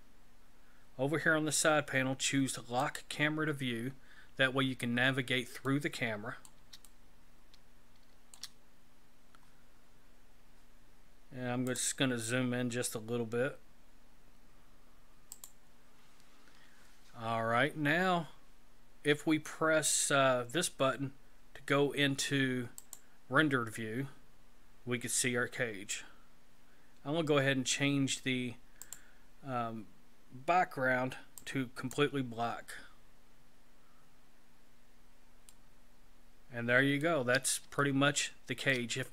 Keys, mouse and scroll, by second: 2.8 click, 3.9-5.1 scroll down 6, 5.6 middle click, 6.9 shift+middle click, 11.7 click, 12.5-13.6 scroll up 1, 13.6-14.7 scroll up 1, 15.3 click, 23.0 click, 28.8 click, 31.4 click, 33.7-35.5 scroll up 5, 35.5 middle click, 37.8 shift+middle click.